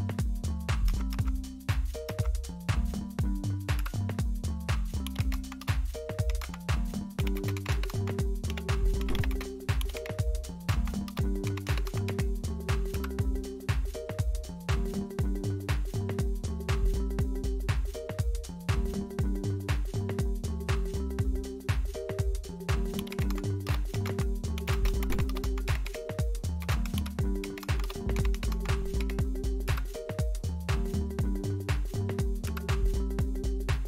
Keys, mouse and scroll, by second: 0.8 Up, 1.1 Up, 2.0 Up, 3.7 Return, 4.8-12.9 typing, 17.2-20.2 drag, 22.7-29.4 typing, 29.6 Return, 32.4 Return.